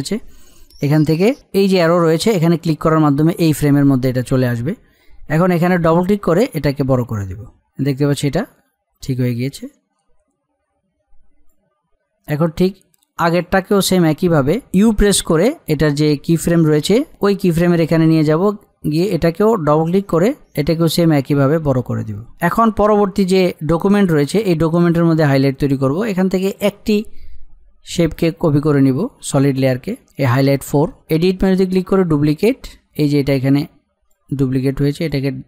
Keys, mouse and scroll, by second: 5.7-14.6 drag, 14.8 u, 17.4-22.8 drag, 22.8-23.2 scroll up 1, 23.5-26.5 drag, 31.2 click, 33.0-35.4 drag.